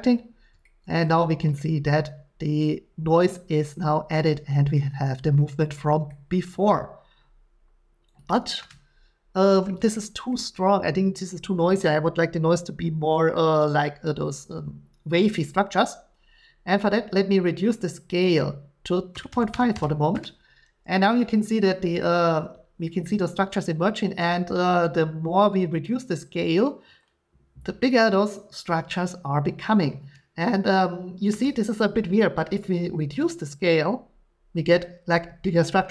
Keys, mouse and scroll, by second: 4.5-5.1 shift+scroll, 6.5 scroll, 8.3 middle click, 8.3 click, 10.3 shift+middle click, 13.7-14.0 shift+scroll, 18.2 click, 19.1-19.5 typing, 19.7 Return, 22.0 middle click, 23.0 scroll, 27.9 shift+click.